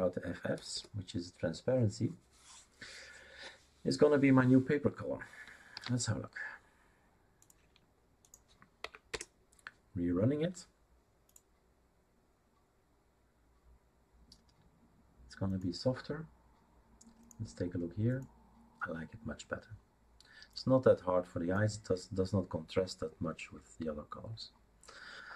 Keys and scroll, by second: 0.6 BackSpace, 0.7 BackSpace, 5.7 ctrl+s, 8.8 Up, 9.1 Return.